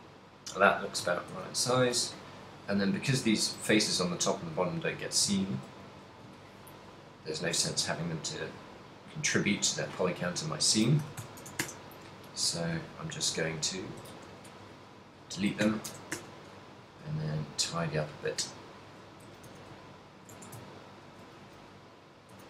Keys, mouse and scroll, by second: 1.1 z, 1.6 a, 2.1 ctrl+click, 3.8 x, 5.2 a, 5.7 ctrl+click, 5.9 a, 6.5 ctrl+click, 8.1 x, 9.8 ctrl+click, 11.1 s, 12.5 KP_1, 13.1 g, 14.0 click, 14.3 a, 14.3 b, 15.4 s, 16.3 s, 16.8 g, 18.0 click, 18.3 g, 19.1 click, 19.1 z, 19.4 a, 19.6 a, 20.1 ctrl+n, 20.6 Tab, 20.8 ctrl+middle click, 21.8 a, 22.0 middle click.